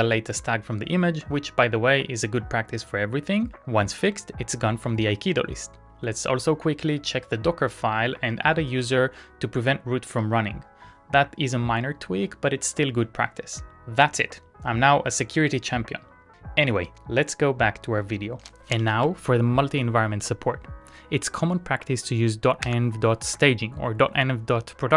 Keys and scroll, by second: 18.6 Return, 18.8 ctrl+a, 19.5 shift+Tab, 22.9 Return.